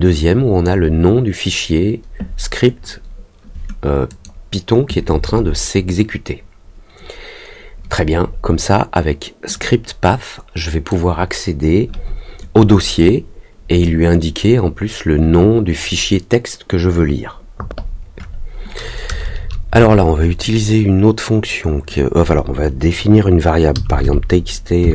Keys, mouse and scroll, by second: 4.0 click, 9.5-10.8 drag.